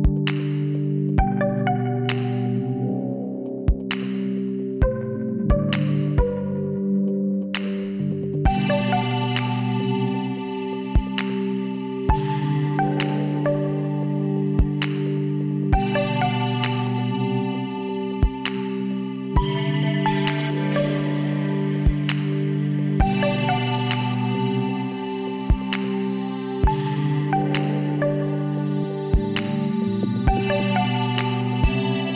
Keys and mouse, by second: 1.4 w, 8.8 click, 9.8-11.1 middle drag, 10.6 e, 11.1 click, 14.0-15.9 drag, 15.3 s, 23.2 right click, 23.9 click, 24.5 middle click, 25.5-27.3 drag, 28.3 e, 29.4 s.